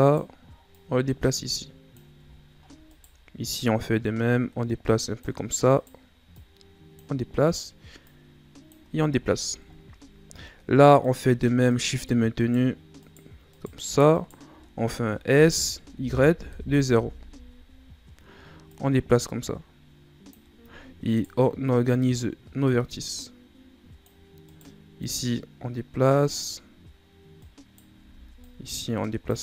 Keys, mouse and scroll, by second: 0.0 right click, 0.7-2.2 drag, 2.2-2.9 shift+scroll up 7, 2.9 right click, 3.5-5.7 drag, 5.7 right click, 6.3-7.4 drag, 7.4 right click, 8.0 click, 9.0 shift+scroll up 7, 9.2-9.7 shift+scroll down 1, 9.7-10.1 ctrl+scroll down 1, 10.1 scroll up 1, 11.0 right click, 11.7 shift+right click, 12.4 shift+right click, 13.0 shift+right click, 13.5 shift+right click, 14.1 shift+right click, 15.3 s, 18.7-21.1 drag, 21.1 right click, 22.0 right click, 22.7-24.5 drag, 24.5 right click, 25.0-27.4 drag, 27.4 right click, 28.1 ctrl+z, 28.4-29.4 drag.